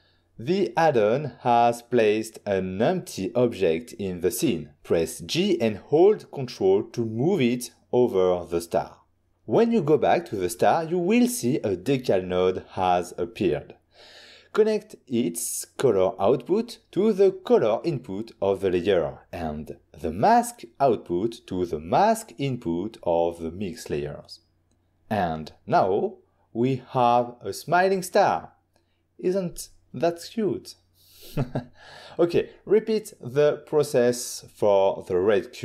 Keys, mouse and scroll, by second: 0.0 click, 3.6 g, 8.1 ctrl+click, 9.0 ctrl+middle click, 10.0 click, 11.8 click, 12.9 click, 13.7 middle click, 14.8 middle click, 16.9 click, 19.6 click, 21.0 click, 22.4 click, 25.1 middle click, 27.3 middle click, 27.6 ctrl+middle click, 29.5 click, 30.3 middle click, 30.9 middle click, 31.4 click, 31.8 click, 32.6 click, 33.8 click, 33.9 click, 34.1 f.